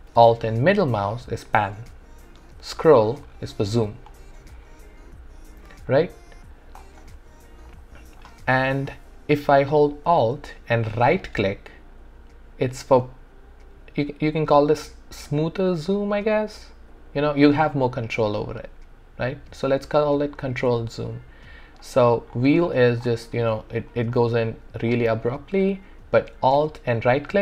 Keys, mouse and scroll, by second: 0.8-2.6 alt+middle drag, 2.8-3.3 scroll up 2, 3.3-3.9 scroll down 2, 3.9-4.5 scroll up 2, 4.5-5.7 scroll down 2, 5.9 alt+click, 7.0 alt+middle click, 7.7-11.1 alt+right drag, 11.1-21.1 alt+right drag, 22.3-22.6 scroll up 1, 22.6-23.0 scroll down 1, 23.0-23.3 scroll up 1, 23.3-23.8 scroll down 1, 23.8-24.3 scroll up 1, 24.3-24.9 scroll down 1, 24.9-25.3 scroll up 1, 25.3-26.5 scroll down 1, 26.9-27.4 alt+right drag.